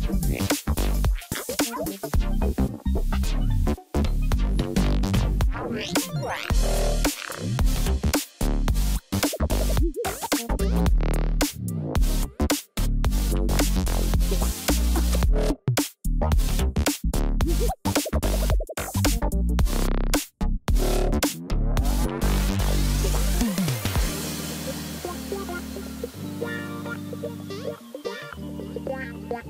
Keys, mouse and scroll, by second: 5.1 right click, 10.1 double click, 19.1-20.0 typing, 22.4 ctrl+t, 29.3 ctrl+click.